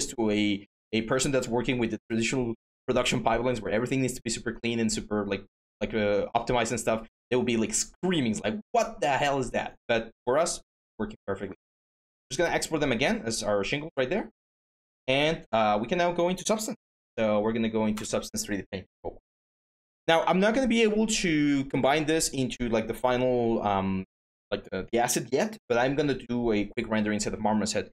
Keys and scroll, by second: 16.4-17.3 typing, 17.7 Return.